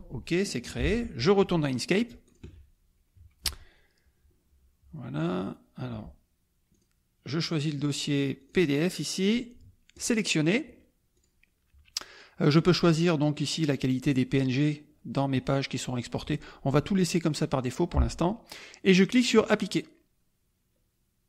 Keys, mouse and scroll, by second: 0.8 alt+Tab, 2.2 alt+click, 5.1 click, 6.7 click, 8.4 click, 9.9 click, 19.3 click.